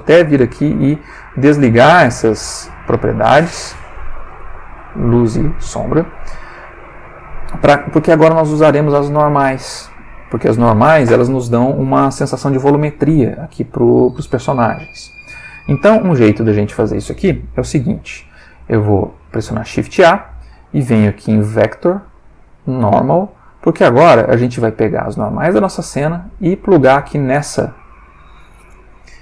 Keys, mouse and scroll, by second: 0.4 click, 3.8 click, 4.4 click, 4.8 click, 5.7 click, 7.2 click, 16.0-16.8 drag, 18.5 shift+a, 22.8 click, 23.8 click, 24.8-26.7 drag, 27.5 click, 29.1 click.